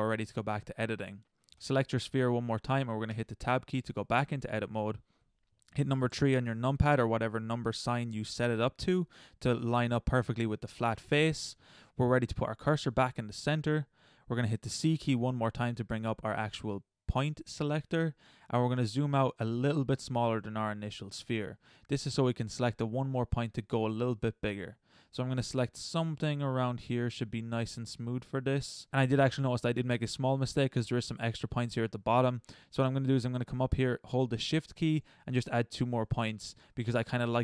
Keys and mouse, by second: 1.1 middle click, 3.1 Tab, 6.1 KP_3, 14.9 c, 28.6-30.3 middle drag.